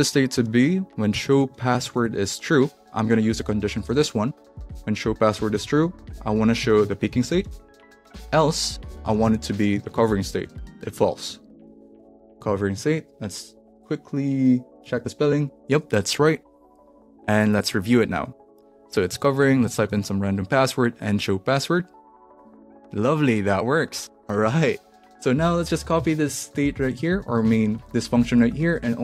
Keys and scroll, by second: 0.3-2.5 typing, 3.8 Return, 4.4 space, 4.6 shift+/, 4.7 space, 5.6 shift+', 6.6-12.0 typing, 9.2 Left, 12.1 Left, 12.8 super+s, 14.8 alt+Left, 20.0 Left, 26.1 alt+shift+Left, 27.4 alt+shift+Left, 28.1 alt+shift+Right, 28.7 super+c.